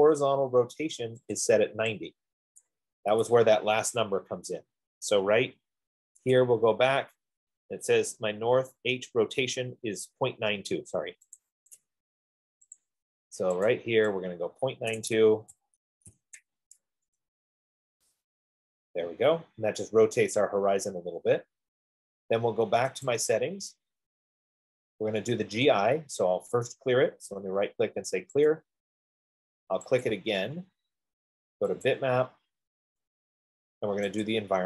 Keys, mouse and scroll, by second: 3.0 click, 3.5 typing, 6.9 click, 11.6 click, 13.0 click, 14.1 click, 15.3 click, 15.7-16.8 typing, 17.4 Tab, 23.4-26.1 drag, 27.2 right click, 28.7 click, 30.4 click, 32.4 click.